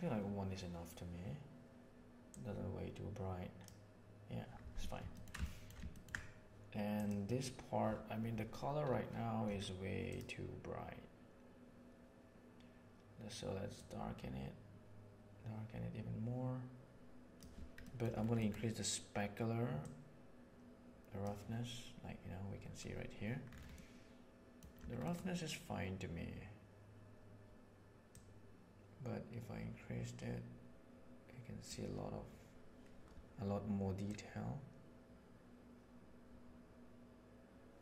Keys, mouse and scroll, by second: 2.2-3.6 drag, 5.1 ctrl+middle click, 5.3 shift+middle drag, 5.9 ctrl+middle click, 6.9 click, 10.0 click, 17.8 middle click, 18.4 middle click, 19.8-21.1 drag, 21.1 right click, 23.9 middle click, 28.1-31.6 drag, 34.1-37.8 drag.